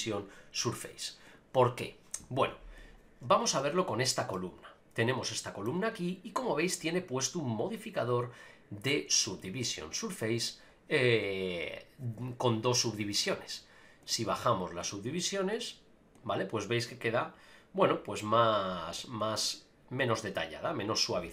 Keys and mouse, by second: 2.8 click, 3.5 KP_Decimal, 4.3-5.6 middle drag, 6.7 click, 9.4 click, 14.0 click, 14.8 click, 16.1 click, 19.2 click, 19.4 click, 20.0 click.